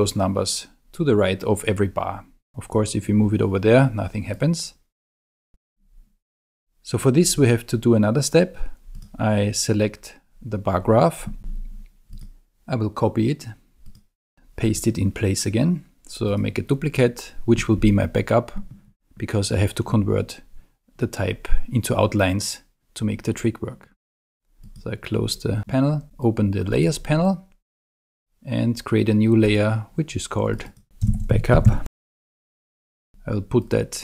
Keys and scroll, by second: 30.8-32.8 typing, 32.8 Return.